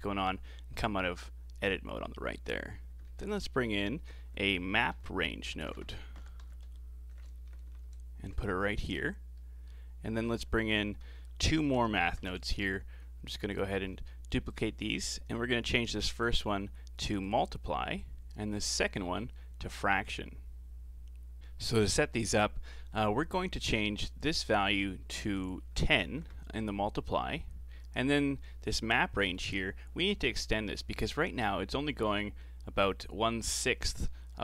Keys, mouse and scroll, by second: 0.4-2.2 scroll up 3, 2.6-3.1 scroll down 3, 3.1 shift+a, 5.7 BackSpace, 7.5 Down, 7.6 Down, 9.4 middle click, 10.1 shift+a, 13.8 shift+d, 16.2-21.4 drag, 21.5-22.1 scroll up 7, 22.1-23.2 middle drag, 23.2-24.2 scroll down 4, 24.2-27.2 drag, 28.7 click.